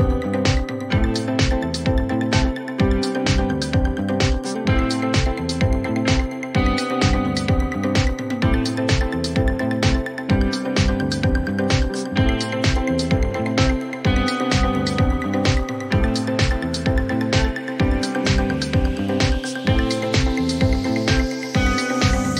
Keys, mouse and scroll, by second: 1.4 click, 1.5 click, 3.6 click, 4.4 click, 6.8-7.9 typing, 9.2-10.7 typing, 9.7-11.8 drag, 12.9 click, 13.7-15.5 typing, 18.2-22.3 drag, 21.0-21.9 typing.